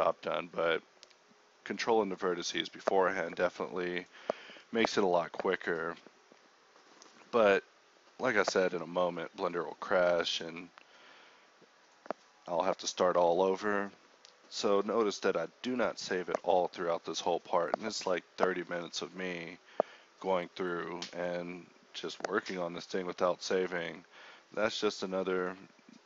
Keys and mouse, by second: 0.1 Tab, 0.7 Tab, 1.0 g, 1.4 Tab, 2.3-5.1 typing, 2.4 Tab, 6.6 g, 7.0 a, 7.4 k, 8.7 click, 8.8-11.2 typing, 9.0 click, 10.2 click, 12.4 a, 13.9-21.1 typing, 22.6 s, 22.9 g, 23.5 Tab, 24.4 shift+a.